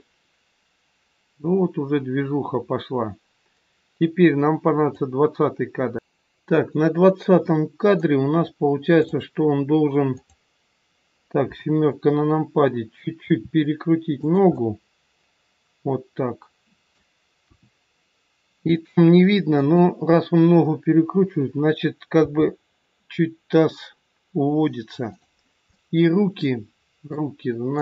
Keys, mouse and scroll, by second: 7.4 middle click, 9.0 click, 10.1 click, 11.4 KP_7, 13.1 r, 14.5 middle click, 17.4 KP_1, 19.4 click, 22.0 g, 25.8 middle click, 27.7 click.